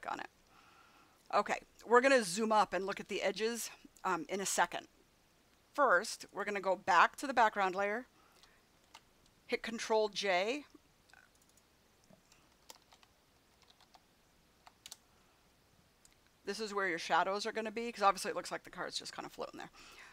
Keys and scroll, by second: 8.8 ctrl+j, 12.3-14.5 typing, 14.8 Return.